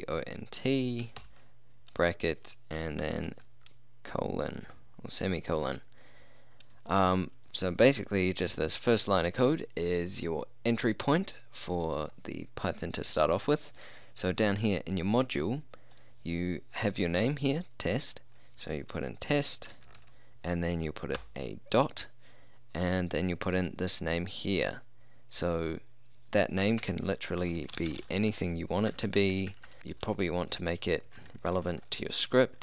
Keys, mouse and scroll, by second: 1.2 shift+0, 3.3 shift+;, 16.0-20.1 drag, 25.4-26.8 drag, 26.8-32.2 typing.